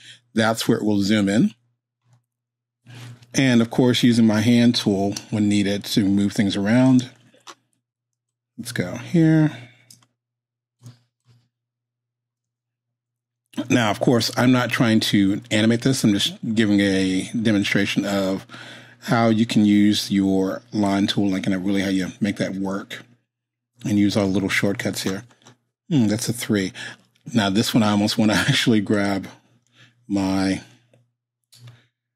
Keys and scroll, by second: 5.2 space.